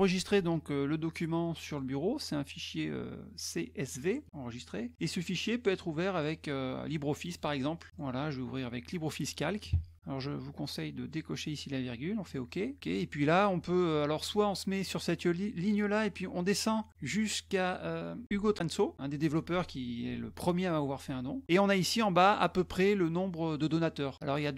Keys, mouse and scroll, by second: 1.7 click, 6.1 click, 7.3 click, 7.9 click, 12.3 click, 14.8 click, 16.0-17.3 scroll down 7, 17.8-18.2 scroll down 2.